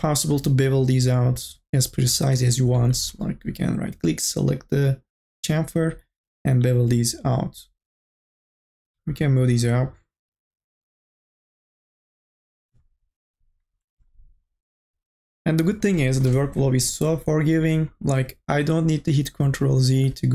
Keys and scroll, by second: 9.0 e.